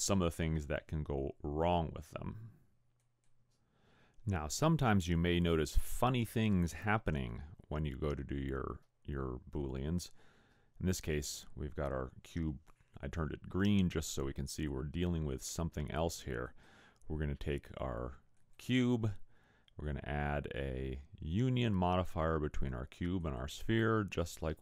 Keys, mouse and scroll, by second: 16.5 click, 18.4 click, 23.3 click.